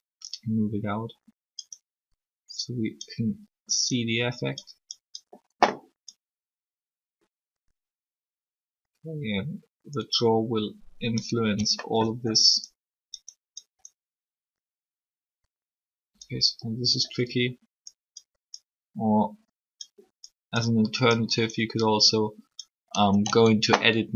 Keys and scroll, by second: 23.2 Tab.